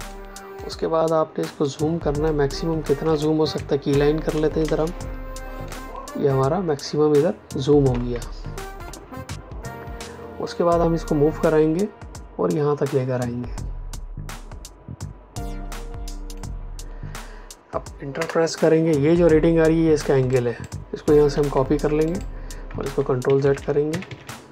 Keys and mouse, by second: 0.0 ctrl+click, 1.6 ctrl+click, 4.5 space, 5.6 ctrl+click, 10.4 click, 18.1 Return, 20.2 click, 21.2 ctrl+c, 22.0 click, 22.7 ctrl+z, 23.2 ctrl+KP_Subtract.